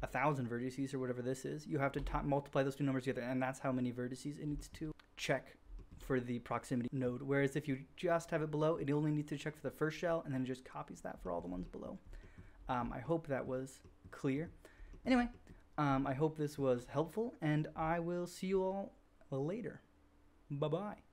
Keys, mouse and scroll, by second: 2.0 Tab, 5.2-6.6 middle drag, 6.7 middle click, 6.8 click, 6.9 middle click, 11.0-11.4 shift+middle drag, 11.4-11.7 drag, 11.8 drag, 12.0-12.4 middle drag, 12.5 middle click, 12.5 shift+drag, 12.9 middle click, 13.0 drag, 13.1 middle click, 13.2 click, 13.3 middle click, 13.4-13.9 drag, 14.7-15.2 shift+drag, 15.6-21.1 drag.